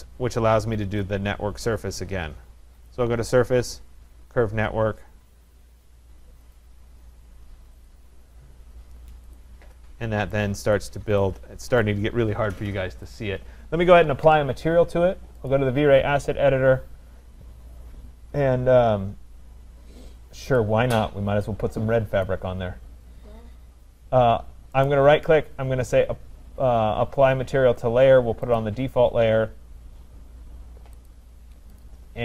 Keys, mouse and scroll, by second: 1.0 click, 2.9 click, 3.0 middle click, 6.6 click, 7.9 click, 8.4-9.2 scroll up 2, 9.2 scroll up 2, 9.4 click, 10.4 right click, 10.8 click, 11.8 right click, 13.0-13.6 scroll, 13.6 click, 15.6 click, 18.6-19.2 scroll, 19.2-20.4 scroll, 20.6 click, 22.3 click, 24.9 right click, 28.6 click, 31.1 click, 31.8 click.